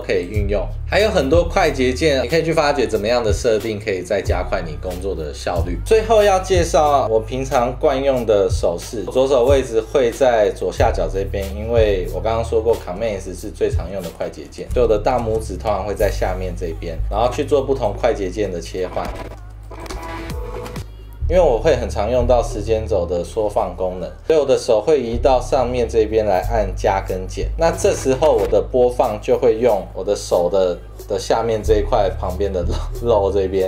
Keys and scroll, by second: 13.0 super+s, 18.1 super+2, 19.5 v, 20.1 space, 21.2 -, 23.5 -, 23.7 =, 27.0 =, 27.3 -, 27.5 =.